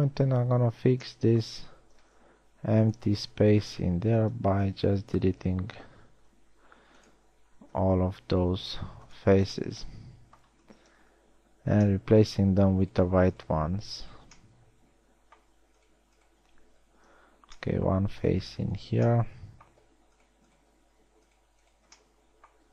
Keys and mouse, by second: 1.1 a, 2.5 ctrl+Tab, 3.8 z, 4.7 z, 5.1 b, 6.0 x, 8.2 z, 8.9 ctrl+Tab, 15.1 middle click, 17.8 f, 21.4 f.